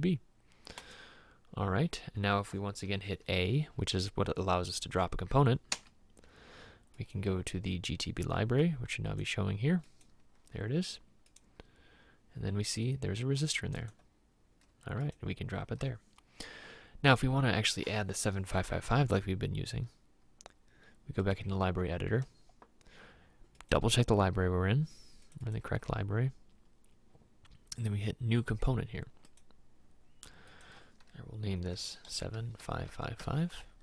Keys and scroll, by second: 5.8 a, 17.1 Escape, 32.2-33.2 typing.